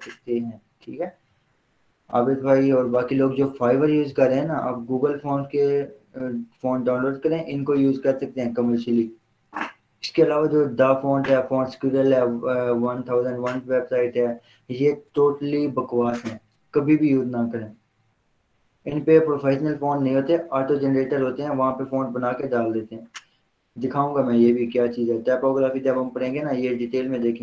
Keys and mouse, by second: 2.2 click, 5.4 click, 8.4 click.